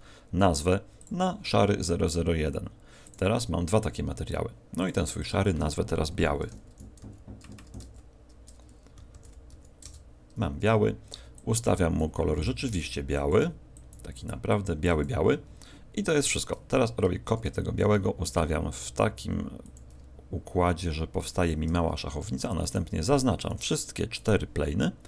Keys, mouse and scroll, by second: 0.9 click, 3.0 click, 5.1 click, 11.3 click, 17.2 shift+d, 19.7 ctrl+click, 22.5 shift+right click, 23.4 shift+right click.